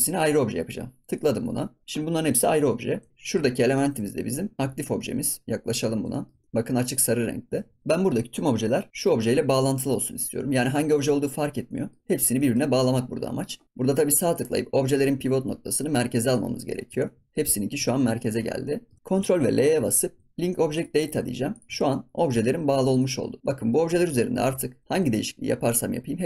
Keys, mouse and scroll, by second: 2.6 ctrl+s, 2.9 Tab, 3.1-3.6 scroll up 2, 3.6-5.4 shift+middle drag, 5.4 scroll down 1, 5.7 middle click, 6.4-7.0 scroll up 2, 7.0 scroll down 1, 7.5 ctrl+s, 7.8 scroll down 2, 8.5 ctrl+s, 9.0-11.6 scroll up 1, 11.6 middle click, 12.0 scroll down 1, 12.3 middle click, 12.7-13.3 scroll up 1, 13.3 middle click, 13.6-17.0 right drag, 17.0 ctrl+s, 17.1 scroll down 1, 17.3 middle click, 17.5 scroll up 2, 17.8 ctrl+s, 18.2 shift+middle click, 18.4 scroll down 1, 18.6 middle click, 18.9 ctrl+s, 19.0 middle click, 19.6 ctrl+l, 21.4 click, 21.7 ctrl+s, 21.9 middle click, 22.8 click, 23.8 Tab, 24.0 scroll up 1, 24.1 middle click, 24.5 ctrl+s, 24.8 click, 24.9 g.